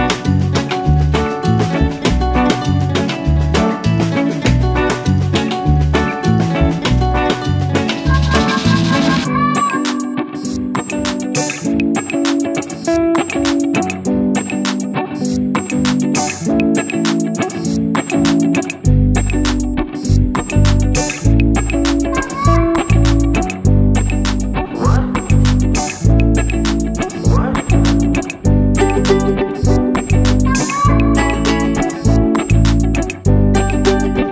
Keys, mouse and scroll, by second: 4.4 a, 5.2 x, 9.6 i, 9.8 i, 14.4 click, 15.9 click, 20.9 click, 28.9 Tab, 31.9 click, 32.9 click.